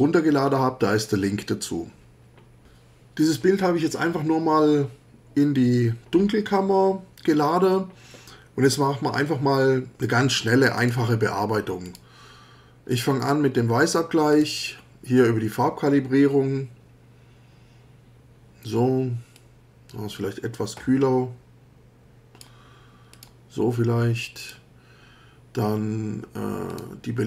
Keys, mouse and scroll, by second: 10.8 click, 11.9 click, 12.9 click, 14.3 click, 19.4-22.6 drag, 23.1 click, 24.4 click, 26.7 click.